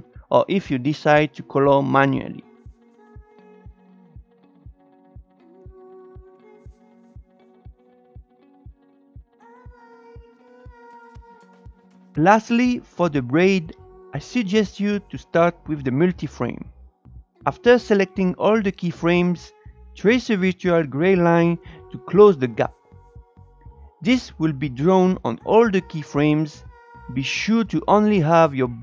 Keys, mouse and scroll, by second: 0.1 Up, 0.1 click, 0.2 Up, 0.3 click, 0.5 Up, 0.5 click, 0.8 ctrl+z, 0.9 ctrl+z, 1.2 ctrl+z, 1.3 click, 1.5 Up, 1.6 Up, 1.7 click, 1.9 Up, 2.1 Down, 2.4 click, 3.1 scroll up 6, 3.3 shift+middle click, 3.4 click, 4.2 drag, 4.8 click, 5.9 click, 6.2 shift+middle click, 6.3 click, 6.7 click, 7.3-7.8 scroll down 4, 7.6 shift+middle click, 7.8-11.7 drag, 13.3-13.7 drag, 19.3-24.2 alt+drag, 24.4-25.3 scroll down 2, 25.3-27.9 drag, 27.9-28.5 scroll down 4, 28.5 shift+middle click, 28.6 click.